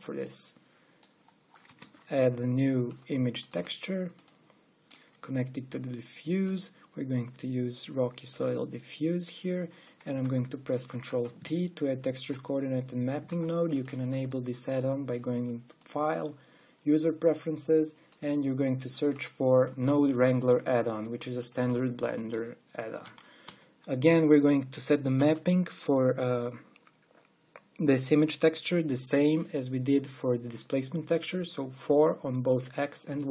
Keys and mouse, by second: 2.5 shift+a, 6.4 click, 10.0-11.5 drag, 11.5 ctrl+t, 13.9 g, 21.3 middle click, 22.1-23.8 drag.